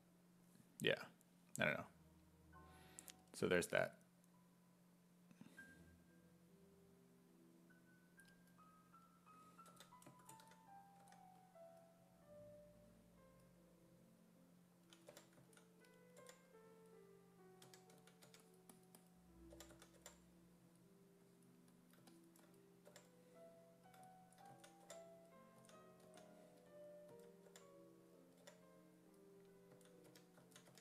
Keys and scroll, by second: 9.7 w, 10.4 w, 11.0 w, 15.1 5, 15.4 s, 16.2 5, 17.4-20.5 typing, 22.9 5, 24.5 s, 24.9 5, 25.6 s, 26.0 s, 27.1 s, 27.5 5, 28.4 5, 29.5-30.8 typing.